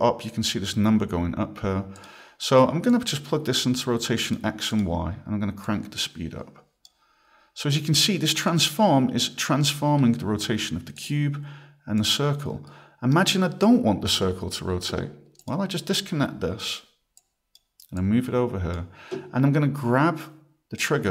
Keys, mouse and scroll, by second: 2.0 click, 2.9 click, 4.7 click, 5.6 click, 8.4 click, 11.0 click, 12.0 click, 12.7 right click, 15.4 click, 16.6 right click, 17.2 click, 18.0 click, 20.8 click.